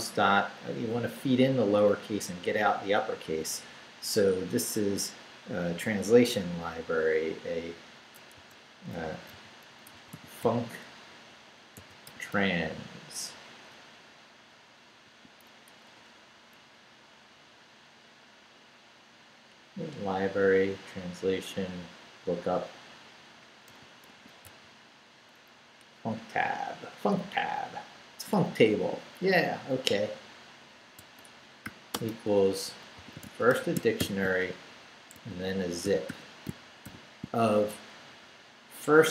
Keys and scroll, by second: 8.4-10.4 typing, 11.5-12.8 typing, 15.0 a, 15.7 BackSpace, 23.4-24.9 typing, 31.0-36.8 typing.